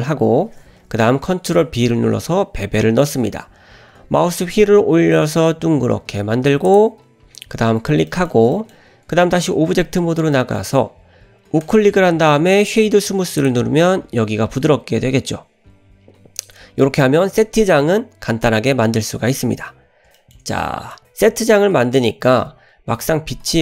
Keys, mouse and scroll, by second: 1.6 ctrl+b, 8.1 shift+middle drag, 8.6 middle click, 9.5 Tab, 10.0-10.4 scroll down 1, 10.4 middle click, 11.6-13.6 right drag, 15.8-16.5 scroll up 2, 19.6-20.1 scroll up 2, 20.2 shift+middle drag, 20.5-21.0 middle drag, 21.7-22.1 scroll down 2, 22.1 middle click.